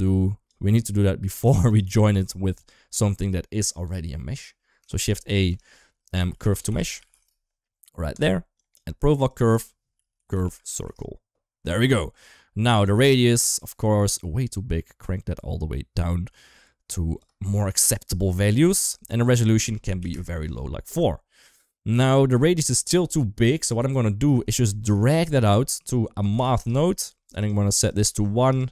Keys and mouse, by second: 0.5 middle click, 1.1 g, 1.9-3.7 middle drag, 4.8 click, 5.3 shift+a, 8.5 click, 9.1-11.7 drag, 12.9-17.0 shift+drag, 17.5 shift+middle click, 17.8 middle click, 19.2 click, 22.0 shift+middle click, 23.5 click, 24.3 shift+middle click, 25.1-27.3 drag, 27.7 click, 28.6-28.7 drag.